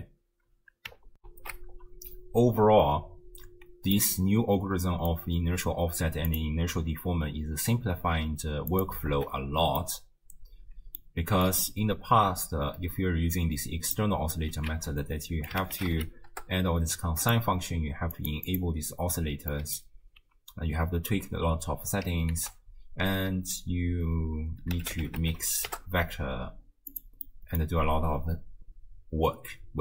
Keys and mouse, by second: 1.2 ctrl+alt+shift+q, 4.1-5.2 middle drag, 6.3 click, 8.0 m, 8.8 click, 9.1 x, 9.8-11.1 middle drag, 11.5-11.8 drag, 14.0 middle click, 14.7 ctrl+a, 18.2 click, 18.5 click, 19.6 middle click, 22.3 ctrl+a, 27.3 middle click.